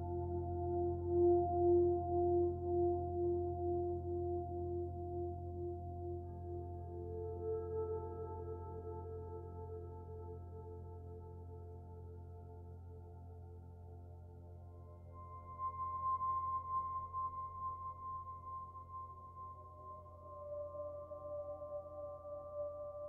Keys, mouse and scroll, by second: 0.2-1.0 scroll up 8, 1.0 middle click, 1.4 click, 1.6 Tab, 2.3 3, 2.4 click, 2.9 e, 4.1 s, 6.3 Tab, 6.6 z, 7.2 click, 8.0 shift+click, 8.3 z, 9.0 Tab, 9.3 z, 9.7 middle click, 10.2 click, 10.4 b, 10.9 z, 11.2 g, 12.8 alt+middle click, 13.0-13.7 alt+scroll up 1, 13.7 g, 15.0 scroll up 2, 15.2 2, 15.6 click, 16.1 click, 16.3-18.3 typing, 17.8 click, 19.2 click, 19.4 b, 19.6 g, 21.2 g, 22.8 click.